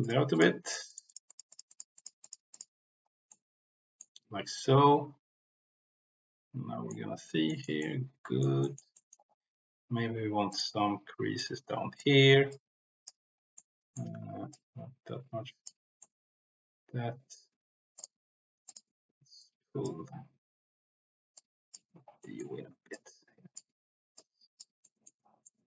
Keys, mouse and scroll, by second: 0.3 click, 0.6 click, 0.8 click, 1.5 click, 1.7 click, 2.1 click, 2.5 click, 3.3 middle click, 4.5-6.9 middle drag, 7.4 shift+middle click, 7.7 middle click, 8.5 shift+middle click, 8.9 middle click, 10.4 click, 11.3 click, 12.5 click, 13.5 middle click, 14.3 ctrl+z, 14.5-15.6 drag, 15.9-17.4 middle drag, 17.9 click, 18.6 click, 19.4 click, 21.3 click, 22.2 middle click, 22.9 click, 24.2 click, 24.8 middle click, 25.4 middle click.